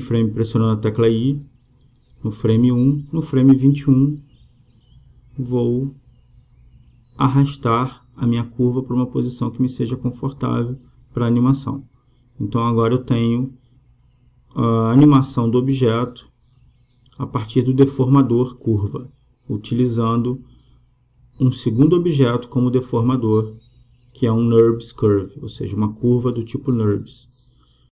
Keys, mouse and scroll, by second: 2.0 i, 5.6-7.3 drag, 8.9 g, 14.8-16.6 drag, 19.5-27.6 drag.